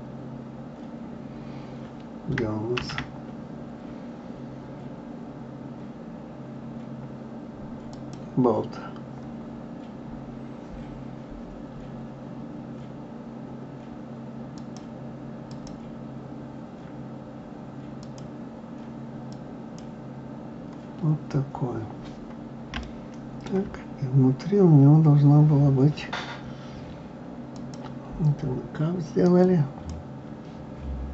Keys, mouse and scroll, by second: 2.8 shift+a, 9.4-9.8 scroll down 2, 14.6 click, 18.0-21.0 drag, 21.0-22.7 scroll down 2, 22.8 shift+middle click, 23.8-24.2 scroll down 1, 24.2-25.1 scroll up 5, 27.5 click.